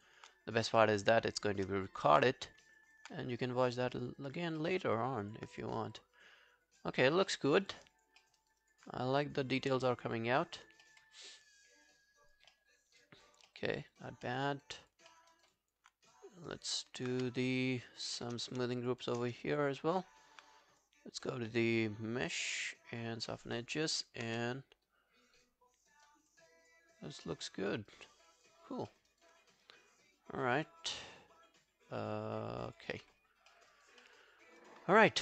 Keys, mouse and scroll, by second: 1.4 shift+click, 2.1 g, 2.5 scroll down 1, 2.8 alt+click, 3.4 right click, 4.3 scroll down 1, 4.6 alt+middle click, 4.9 alt+scroll down 1, 5.2 alt+click, 6.0 alt+click, 7.0 alt+right click, 7.3 alt+middle click, 7.5 alt+right click, 7.8 alt+click, 8.2 alt+middle click, 8.4 alt+right click, 8.7 alt+click, 9.4 alt+scroll down 1, 9.6 alt+click, 10.9 alt+middle click, 11.2 alt+scroll down 1, 11.4 alt+click, 12.5 alt+middle click, 12.9 alt+scroll down 1, 13.0 alt+click, 13.5 alt+middle click, 13.7 alt+right click, 14.0 alt+click, 14.3 alt+middle click, 14.5 alt+right click, 14.8 alt+click, 15.1 alt+middle click, 15.3 alt+right click, 15.5 alt+click, 16.4 alt+scroll down 1, 16.5 alt+click, 17.2 q, 17.4 right click, 18.8 shift+click, 19.0 shift+click, 19.3 scroll down 1, 19.5 alt+click, 19.8 alt+right click, 21.2 double click, 23.5-23.8 scroll down 3, 24.0 alt+right click, 24.3 w, 24.5 right click, 26.7 double click, 26.9 scroll down 2, 27.8 alt+right click, 28.0 alt+click, 28.6 alt+scroll down 5, 28.9 alt+middle click, 29.1 alt+right click, 29.4 alt+click, 33.0 alt+middle click, 33.3 alt+scroll down 3, 33.5 alt+middle click, 33.7 alt+right click, 34.0 alt+middle click, 34.6 alt+click, 35.1 alt+middle click.